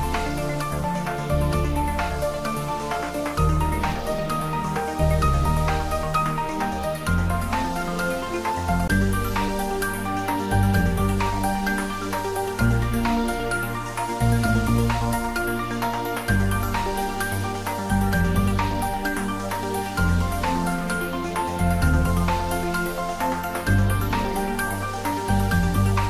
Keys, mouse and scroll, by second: 3.2 click, 8.4 click, 10.0-10.5 scroll up 1, 13.9 click, 14.8-15.4 scroll down 1, 15.4-16.3 scroll up 1, 16.3 s, 20.1 click, 23.4-24.2 scroll down 1.